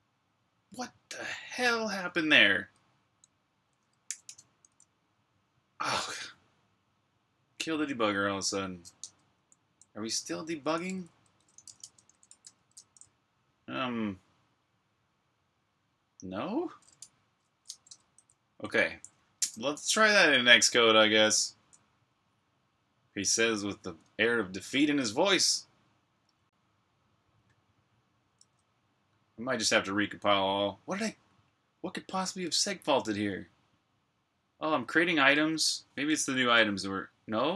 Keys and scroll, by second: 3.7-4.7 typing, 8.9 Escape, 9.0-12.6 typing, 17.5 typing, 20.0 super+Tab.